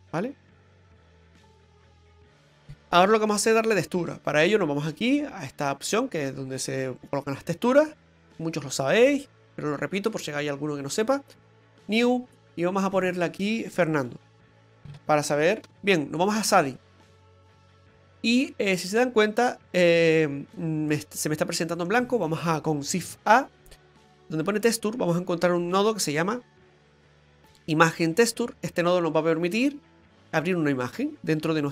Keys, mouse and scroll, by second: 24.3 typing.